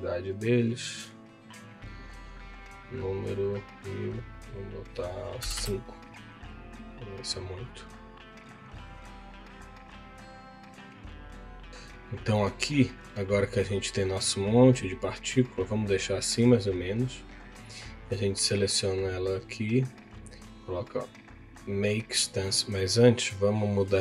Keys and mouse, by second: 3.3-5.6 drag, 7.1 click, 12.3-16.4 drag, 16.7 click, 18.4 click, 19.7 click, 22.4 middle click, 23.3 click.